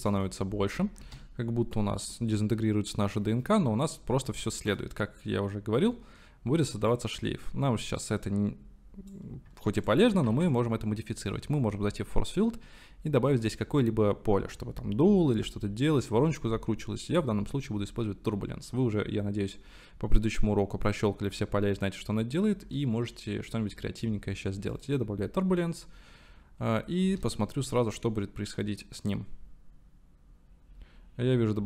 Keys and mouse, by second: 1.2 space, 4.5-5.6 middle drag, 7.2-9.3 middle drag, 10.3 shift+a, 27.1 space.